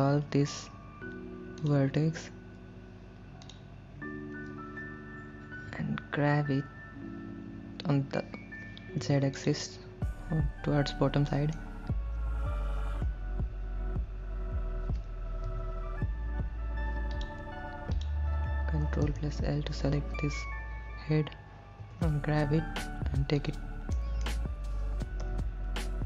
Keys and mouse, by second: 5.8 g, 9.1 z, 9.5 click, 11.5 middle click, 18.2 click, 19.2 ctrl+l, 22.1 g, 22.7 z, 23.6 click, 24.2 middle click, 25.5 KP_1.